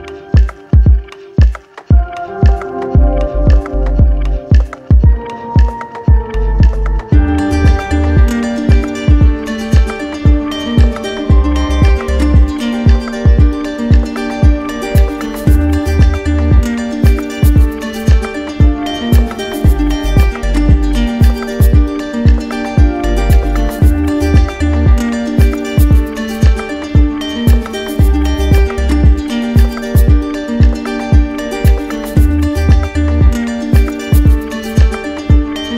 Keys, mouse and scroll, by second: 1.0 click, 2.4 click, 3.5 alt+click, 5.0 click, 5.9 click, 9.1 click, 12.1 click, 13.3 alt+click, 14.4 click, 15.3 click, 16.7 click, 23.6 click, 25.0 click, 26.9-27.9 drag, 28.7-29.7 drag, 30.8 click, 33.5 click, 34.4 click.